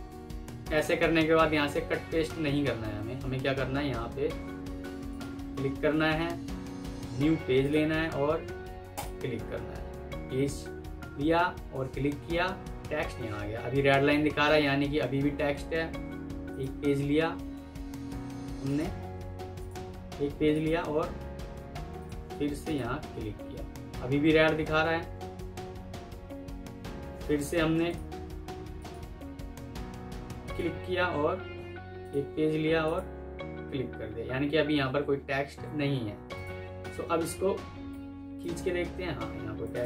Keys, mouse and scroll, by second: 2.6 ctrl+z, 35.4 ctrl+z, 36.7 double click, 38.9 ctrl+z, 39.7 double click.